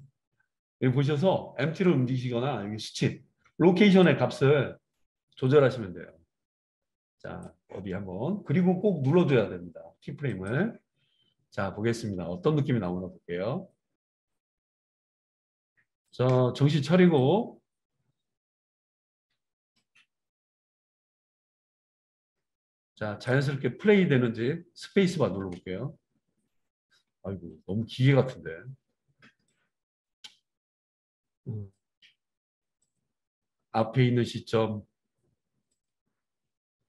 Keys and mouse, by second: 10.5-12.0 middle drag, 12.0-32.9 drag, 25.4 space, 26.9 space, 32.9-36.8 middle drag.